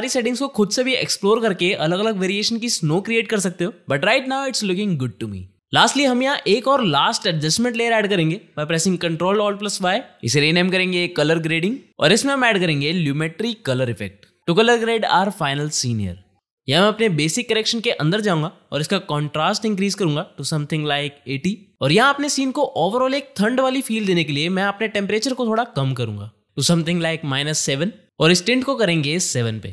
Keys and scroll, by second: 9.7 ctrl+alt+y, 9.9 Return, 10.3-14.2 typing, 12.9 ctrl+space, 14.8 Down.